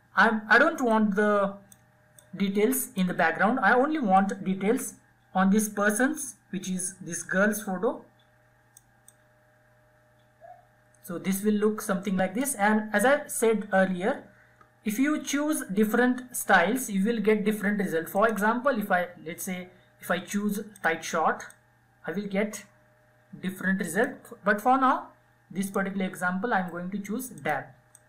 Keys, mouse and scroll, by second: 17.0 click, 19.6-28.0 drag.